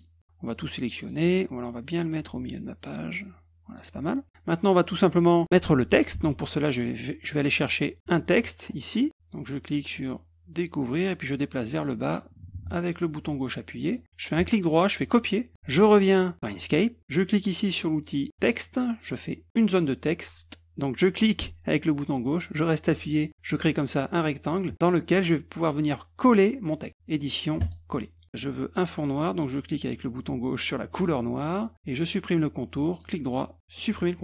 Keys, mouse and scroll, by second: 0.4 click, 1.5-3.7 drag, 6.1 alt+Tab, 8.3-9.0 scroll up 3, 9.9-13.9 drag, 14.3 right click, 15.0 click, 18.3 click, 21.1-23.5 drag, 25.1 click, 27.6 click, 30.9 click, 32.9 right click, 33.7 click.